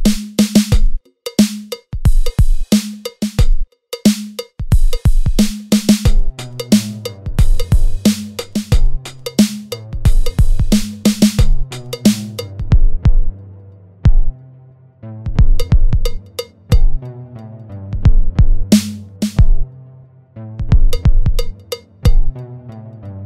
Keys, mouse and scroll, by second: 0.8 click, 1.0 g, 1.3 Tab, 1.3-1.6 scroll down 3, 1.4 click, 1.5 click, 1.6 click, 1.6 middle click, 1.6 scroll up 3, 1.7 middle click, 1.7 scroll down 1, 1.9 Tab, 1.9 scroll up 1, 2.1 click, 2.2 alt+click, 2.5 shift+middle click, 2.5 scroll up 1, 2.7 click, 2.8 click, 3.2 click, 4.6 Tab, 4.6 right click, 4.7 scroll down 1, 4.8 scroll up 1, 4.9 click, 4.9 alt+click, 5.1 s, 5.4 click, 5.5 click, 5.6 s, 6.3 Tab, 6.3 scroll down 1, 6.5 middle click, 6.6 click, 6.7 click, 6.7 scroll up 2, 6.8 Tab, 6.8 scroll down 1, 6.8 Tab, 6.8 scroll up 1, 7.0 Tab, 7.0 click, 7.2 Tab, 7.2 click, 7.2 alt+click, 7.5 g, 8.1 Tab, 8.1 click, 8.2 alt+click, 8.3 alt+click, 8.4 alt+click, 8.4 g, 9.2 alt+shift+click, 9.5 right click, 9.9 Tab, 9.9 scroll down 2, 10.0 scroll up 2, 10.4 alt+shift+click, 10.6 right click, 10.9 scroll down 2, 11.0 Tab, 11.0 middle click, 11.1 middle click, 11.2 click, 11.2 scroll up 2, 11.4 Tab, 11.5 alt+click, 11.6 right click, 11.8 Tab, 11.8 click, 11.9 alt+click, 12.0 alt+click, 12.1 Tab, 12.2 right click, 12.4 scroll down 2, 12.5 middle click, 12.5 scroll up 2, 13.3 Tab, 13.3 scroll down 1, 13.5 s, 13.8 Tab, 14.0 scroll down 1, 14.1 ctrl+r, 14.7 ctrl+r, 15.1 alt+click, 15.2 g, 15.5 Tab, 15.5 scroll down 3, 15.6 middle click, 15.7 scroll up 2, 15.9 Tab, 15.9 click, 16.0 click, 16.2 alt+3, 16.2 alt+click, 18.1 right click, 18.7 scroll up 1, 18.7 i, 19.1 scroll down 1, 19.8 ctrl+z, 19.8 scroll up 1, 19.9 ctrl+z, 19.9 scroll down 1, 20.7 click, 20.9 s, 21.5 scroll up 1, 21.7 middle click, 21.7-22.3 scroll down 1, 22.5 e.